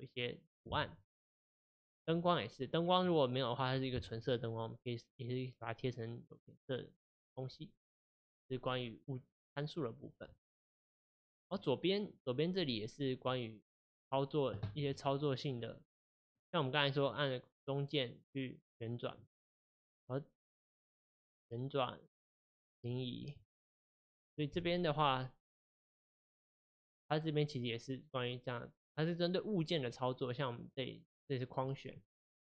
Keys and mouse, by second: 2.2-3.1 drag, 3.1-6.1 middle drag, 13.3-16.4 middle drag, 17.2-20.2 middle drag, 21.4-25.7 middle drag, 30.6 click, 32.1-32.4 drag.